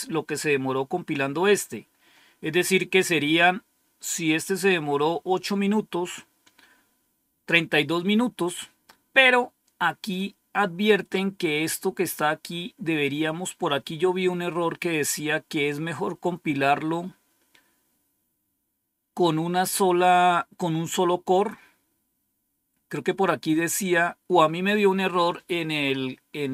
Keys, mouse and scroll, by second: 9.8-10.8 scroll down 2, 10.8-12.2 scroll down 1, 12.2-13.6 scroll down 1, 13.6-14.1 scroll down 1, 14.8 scroll down 1, 15.7-16.0 scroll down 1, 16.9 scroll down 1.